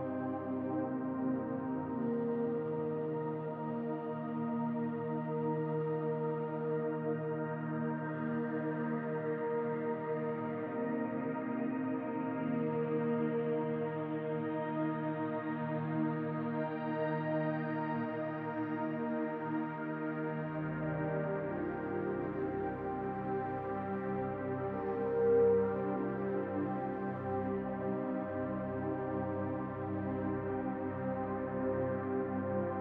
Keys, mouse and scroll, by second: 20.0 shift+a.